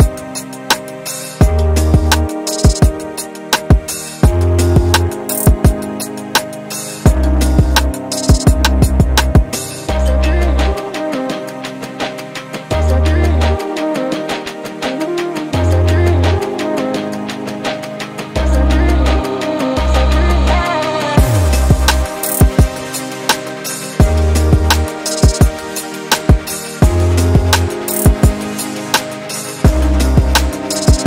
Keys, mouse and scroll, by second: 0.2 Tab, 0.6 middle click, 1.1 scroll down 2, 1.3 Tab, 1.5 click, 1.7-3.3 middle drag, 3.3 click, 3.9-4.2 scroll down 2, 4.2-6.0 middle drag, 6.0-6.5 scroll up 2, 6.5 click, 6.7-7.1 scroll down 4, 7.1 KP_7, 7.4-8.2 scroll up 2, 8.2 shift+middle drag, 8.5 scroll up 2, 9.2 Tab, 9.6 shift+middle click, 9.9 scroll up 1, 10.1 scroll down 1, 10.4 scroll up 1, 10.6 1, 10.8-11.3 middle drag, 11.3-12.1 scroll down 1, 12.1 click, 13.9 KP_2, 15.4 click, 17.3 KP_7, 17.7-18.3 scroll up 1, 18.3 scroll up 1, 18.8 shift+middle click, 19.3 g, 22.9 click, 23.1 z, 24.3 shift+click, 25.4 g, 26.9 z, 27.1 scroll down 2, 27.3 shift+middle click, 28.3 click, 29.3 click, 30.5 shift+click.